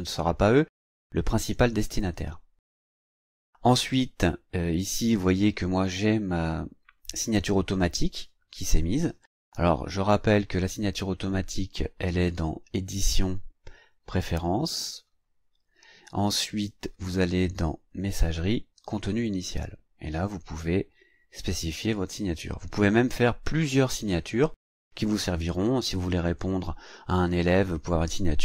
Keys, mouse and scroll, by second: 12.3 click, 14.8 click, 17.9 click, 18.7 click.